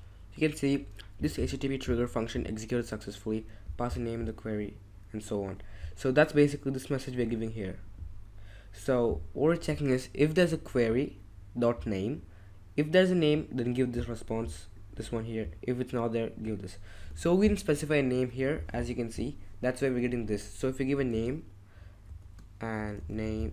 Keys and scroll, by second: 17.1 ctrl+Tab, 21.1-23.5 typing.